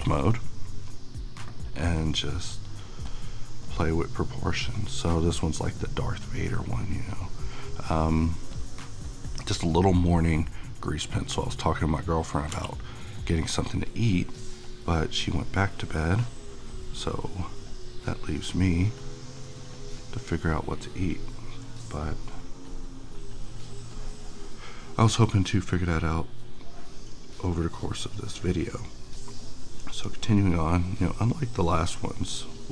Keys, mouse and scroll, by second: 0.8 [, 2.0-11.7 drag, 12.5 f, 13.2-32.7 drag.